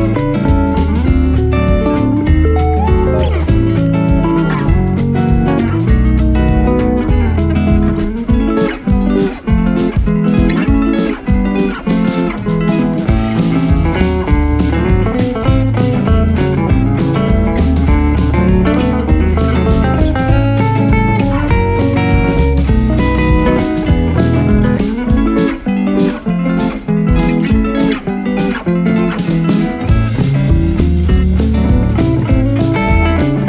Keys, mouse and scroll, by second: 0.0 alt+scroll, 0.1 alt+scroll up 1, 0.7-1.1 typing, 1.6 alt+right click, 8.4 double click, 9.8 x, 10.5 alt+click, 10.8-11.4 alt+scroll up 2, 11.4 double click, 12.5 double click, 12.6 ctrl+z, 12.8 x, 13.7 double click, 18.1 double click, 20.4 x, 21.1 click, 24.8 x, 24.9 double click, 25.1 double click, 26.6 x, 27.1 alt+right click, 27.7 double click, 29.3 double click, 29.4 alt+right click, 29.9 double click, 31.8 alt+scroll down 1, 32.9 space.